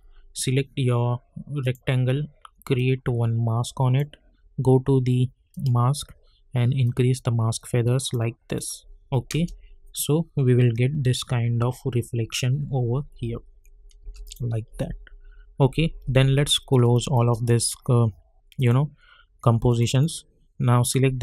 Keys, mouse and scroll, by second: 1.6-8.5 drag, 9.3 space, 14.0 space, 14.2 click, 14.7 u, 16.3 click.